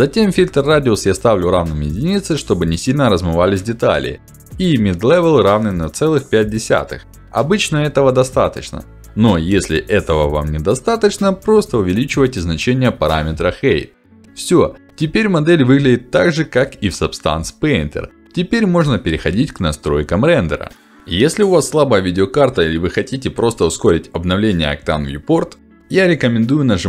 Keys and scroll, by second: 3.3 BackSpace, 3.9 5, 4.4 Return, 7.9 Return, 14.1 Return, 23.0 ctrl+alt+d.